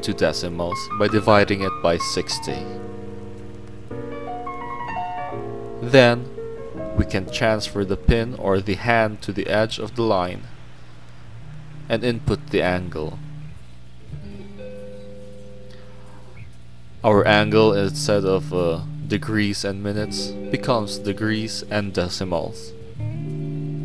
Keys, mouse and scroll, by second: 3.3 click, 4.0 click, 5.1 middle click, 5.5 scroll up 1, 6.7 r, 7.0 click, 7.1 click, 7.8 click, 8.6 r, 8.9 click, 9.1 click, 9.5 click, 9.8 scroll down 2, 10.4 click, 13.6 click, 14.6-15.8 drag, 21.0-22.0 drag, 22.2 scroll down 1, 22.4 middle click, 23.4 middle click.